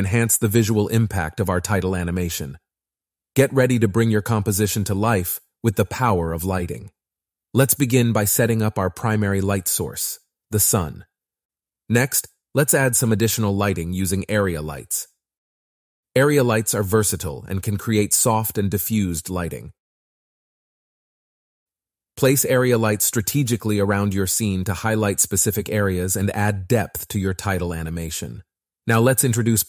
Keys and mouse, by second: 1.7 click, 3.0 click, 3.6 click, 5.8-6.8 drag, 8.3 click, 8.9 click, 9.3 click, 10.5 r, 10.7 t, 15.9 s, 16.9 click, 17.8 click, 18.4 click, 20.2 click, 20.8 KP_1, 22.6 click, 24.1 click, 24.8 click.